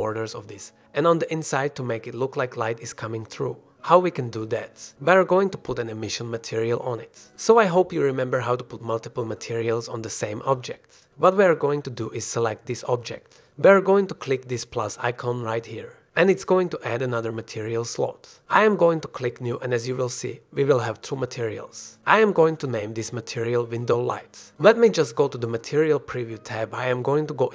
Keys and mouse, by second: 1.0-1.7 middle drag, 4.1 click, 7.8-8.1 drag, 8.1 shift+middle drag, 8.3 shift+click, 8.6 click, 8.9 shift+click.